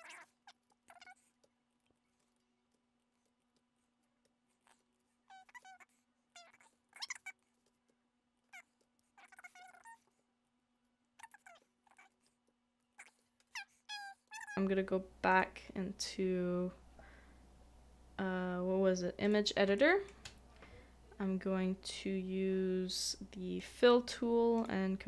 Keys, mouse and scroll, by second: 2.2 middle click, 2.7 typing, 4.7 typing, 4.7 shift+middle click, 6.7 shift+middle click, 7.0 shift+middle click, 10.1 typing, 11.9 double click, 13.0 typing, 13.0 shift+middle click, 14.3 shift+middle click, 19.6 shift+i, 19.8 shift+middle click.